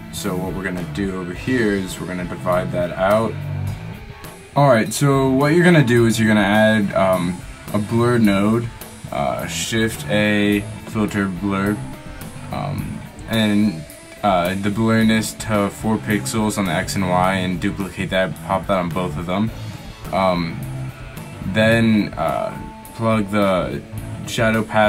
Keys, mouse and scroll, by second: 3.8 click, 21.6-23.0 middle drag.